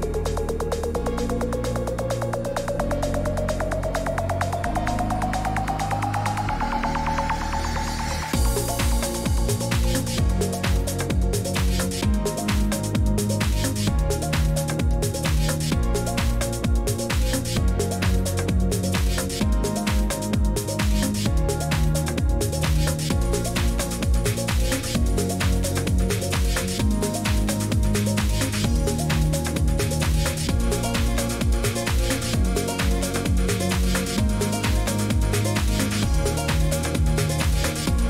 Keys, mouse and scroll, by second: 0.1 click, 1.7 middle click, 2.4-4.0 typing, 6.0 right click, 6.8 d, 7.2 q, 8.3 click, 11.0 click, 19.8 click, 21.1 click, 22.1 click, 23.2 click, 26.9 click, 28.2 click, 28.7 click, 29.6 click, 30.8 click, 31.6 click.